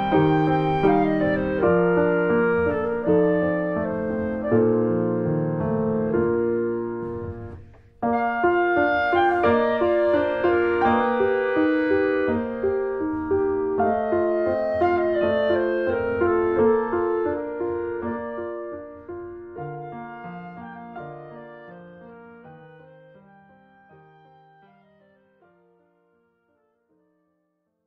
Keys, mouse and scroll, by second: 1.6 scroll up 1, 1.8-3.7 middle drag, 3.7 click, 3.9-4.7 scroll up 3, 4.1 middle click, 4.4 shift+middle click, 4.7-6.3 middle drag, 6.3 scroll up 1, 6.5-8.4 shift+middle drag, 8.4 click, 9.2 click, 9.2-9.6 scroll up 1, 9.6 middle click, 10.5 shift+scroll up 1, 10.8 middle click, 11.3 scroll up 1, 11.5-13.6 shift+middle drag, 13.6-14.0 scroll up 1, 14.0-15.7 middle drag, 15.7-16.1 scroll up 1, 16.1-27.1 middle drag, 27.1 click.